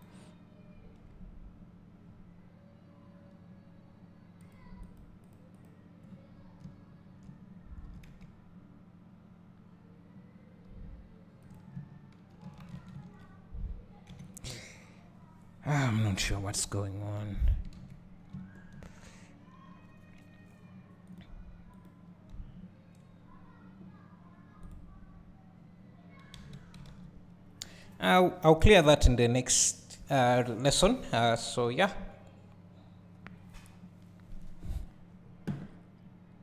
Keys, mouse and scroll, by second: 4.4 click, 4.8 click, 5.2 click, 5.5 click, 6.3 scroll, 6.6 Return, 7.9 s, 11.5-14.3 drag, 14.3 x, 15.9 KP_7, 17.0 scroll up 1, 18.3 `, 19.1-20.0 scroll down 1, 20.0 scroll up 1, 21.9 click, 22.3-23.2 scroll down 1, 23.2 scroll up 1, 24.7 click, 26.3 alt+a.